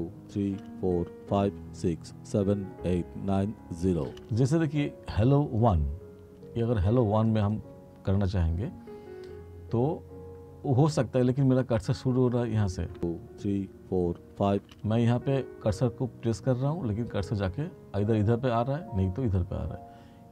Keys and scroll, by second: 4.1 space, 13.0 space, 14.7 space.